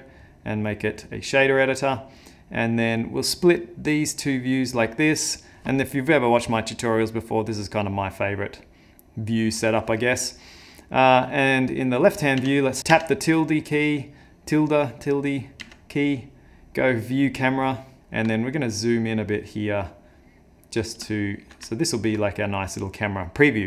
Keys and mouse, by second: 0.2 click, 4.0 click, 7.6 click, 8.6 click, 11.6 middle click, 12.4 `, 15.6 `, 18.0 click, 18.0 n, 18.4 ctrl+middle click, 21.1 shift+middle click, 21.7 ctrl+middle click.